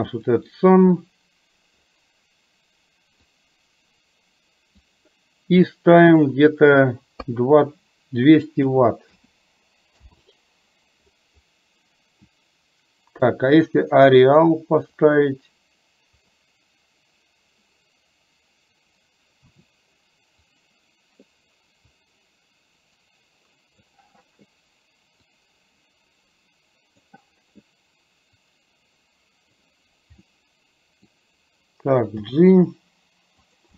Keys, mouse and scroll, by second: 0.3 click, 3.6-4.9 drag, 6.1-10.2 drag, 13.7 click, 15.3-16.4 drag, 19.6 s, 22.2-23.9 drag, 25.3-27.2 drag, 28.6-29.9 drag, 30.4-31.2 middle drag, 32.3 g.